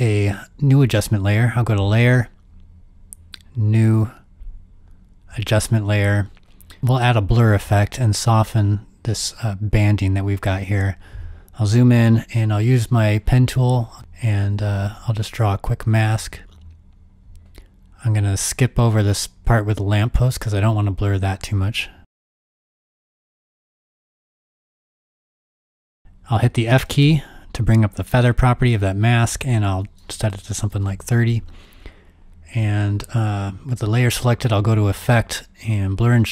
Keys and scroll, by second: 13.5 g, 27.0 f, 30.3-31.3 typing.